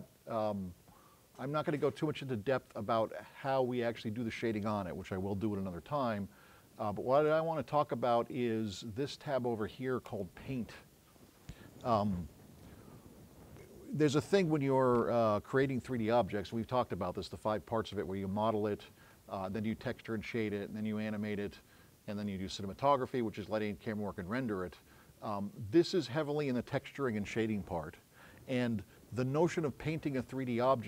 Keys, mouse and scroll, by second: 7.2 click.